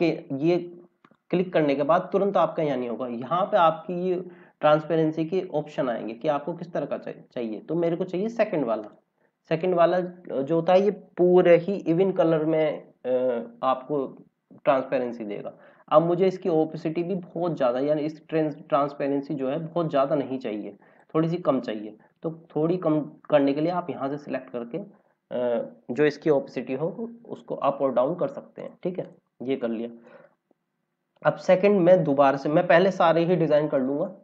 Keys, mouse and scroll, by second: 8.7 click, 13.2 scroll up 1, 15.8 click, 25.3 scroll down 1, 29.8-30.1 scroll up 1, 30.7-32.4 scroll down 1, 33.7 click.